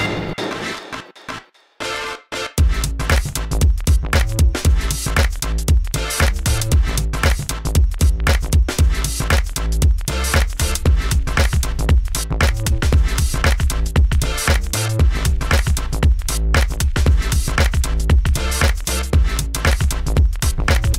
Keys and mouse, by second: 3.0 Tab, 4.0 a, 5.2-7.6 typing, 7.3-12.8 drag, 9.0 g, 9.9 Tab, 11.9 Tab, 13.9 KP_1, 14.8 e, 15.1 s, 16.7 w, 17.3 a, 17.4 b, 17.8 g, 18.7-20.7 drag, 18.8 Tab, 19.4 a, 19.6 alt+z, 20.7 ctrl+s.